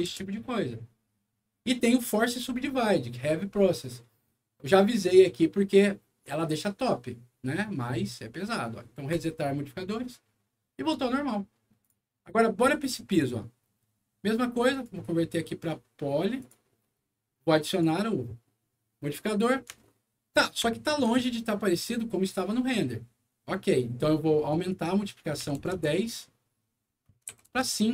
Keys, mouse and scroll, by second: 0.1 Return, 9.0 click, 11.7 click, 12.2 middle click, 12.5 scroll down 1, 13.0 click, 14.6 right click, 16.3 click, 17.6 click, 19.7 alt+middle click, 20.6 alt+middle click, 21.5 alt+middle click, 24.4 click, 24.6 click, 25.3 KP_1, 25.6 KP_0, 25.7 Return, 27.2 KP_5, 27.4 Return.